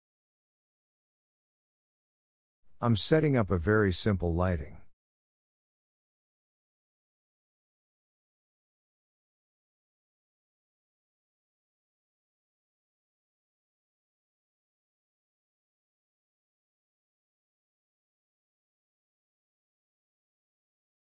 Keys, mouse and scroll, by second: 1.1 click, 1.6 shift+a, 5.6 g, 7.6 click, 8.4 click, 9.4 KP_0, 10.7 g, 13.0 click, 14.2 click, 15.0 r, 17.3 KP_0, 18.1-18.4 scroll down 1, 18.4-19.5 shift+middle drag, 19.5 g, 20.7 click.